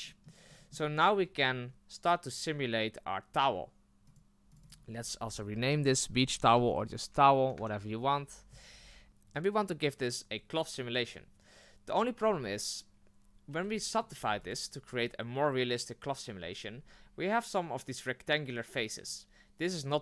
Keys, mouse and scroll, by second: 3.3 click, 4.6-8.6 drag, 9.1-12.2 scroll up 4, 12.2 Tab, 14.1 w, 14.2 w.